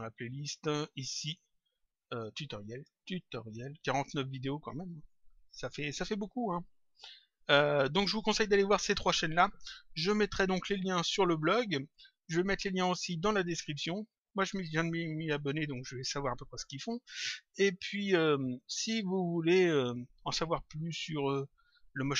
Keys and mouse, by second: 2.4 click, 18.4 click, 19.4 click.